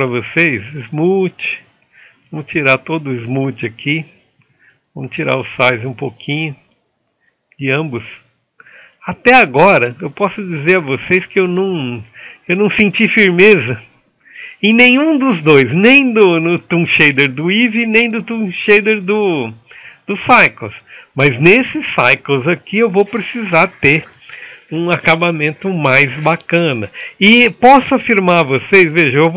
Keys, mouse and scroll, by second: 11.6-16.3 drag, 17.6-19.0 drag, 19.0-22.1 middle drag.